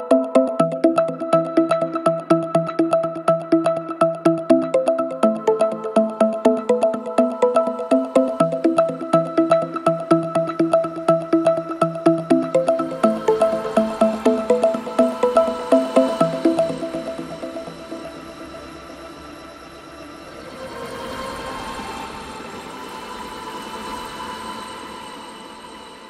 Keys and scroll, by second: 7.3 ], 9.7 ], 13.2 4, 13.5 1, 14.9 3, 15.3 ], 20.1 4, 24.9 ].